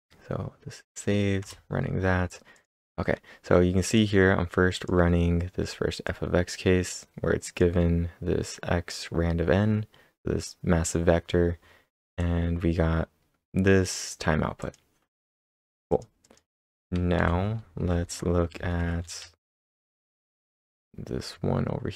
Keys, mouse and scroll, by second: 1.4 Return, 2.5 click, 3.9 Return, 3.9 click, 4.8 click, 6.1-10.0 drag, 12.2-15.9 drag, 15.9 click, 16.0-16.7 typing, 16.2 click, 17.2 ctrl+/, 17.8-19.1 typing, 19.4 ctrl+/, 19.9 ctrl+s, 20.1 Return, 20.1 Up, 20.1 ctrl+`.